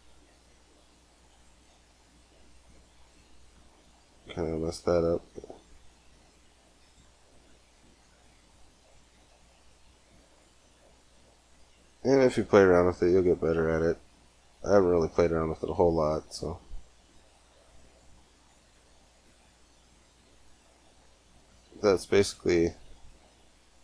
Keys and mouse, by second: 1.1 click, 3.4 g, 6.0-8.7 drag, 6.9 g, 9.9 click, 10.1 g, 12.1 g, 12.4-13.8 drag, 15.3 click, 15.4 g, 20.0 Tab, 20.8 Tab, 21.3 g, 22.3 a, 22.5 a, 22.7 g.